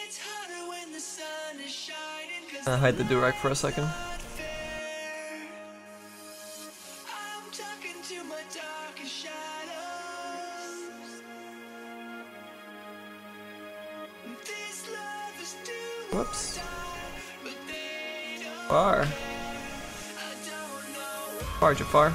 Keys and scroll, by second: 15.9 z.